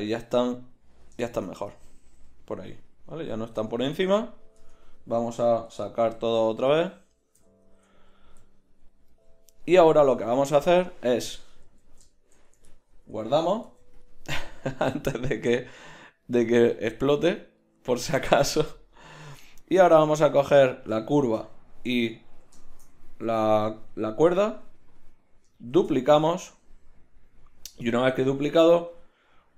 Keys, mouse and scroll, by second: 3.6 Tab, 4.6 Tab, 6.0 alt+h, 7.4 a, 7.7 Tab, 9.5-10.6 drag, 11.7 z, 13.6 ctrl+s, 15.6-19.6 right drag, 19.6 middle click, 19.7-21.1 right drag, 22.0 right drag, 22.1 right click, 22.3 right drag, 22.7 right click, 23.9 z, 25.8 shift+d.